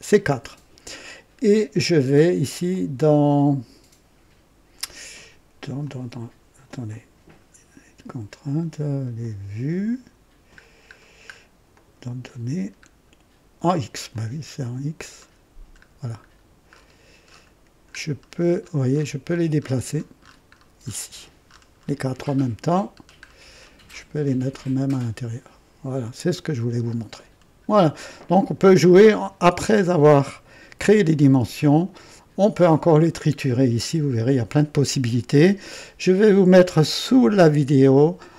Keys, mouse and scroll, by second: 2.6 click, 5.8 click, 6.9 click, 9.1 click, 10.5-10.9 scroll up 1, 10.9 scroll down 1, 11.7 click, 12.4-12.7 scroll down 1, 14.0 click, 15.0 scroll down 2, 15.8-16.1 scroll up 2, 16.7-17.0 scroll up 2, 17.3 scroll up 2, 18.1-19.2 scroll down 5, 21.7-22.0 scroll down 1, 22.9-23.5 scroll down 2, 26.2 click, 27.0-27.3 scroll down 2, 32.6 click, 35.6 click.